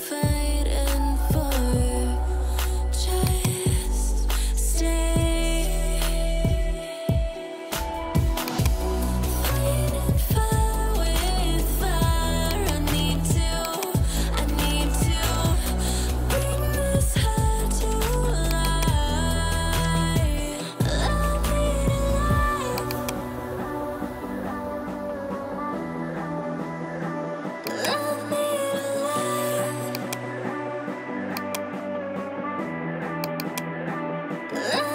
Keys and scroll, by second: 1.6 ], 19.1-20.1 typing, 22.0 ctrl+g, 23.9-25.9 typing, 26.1 Return, 32.7 ctrl+j.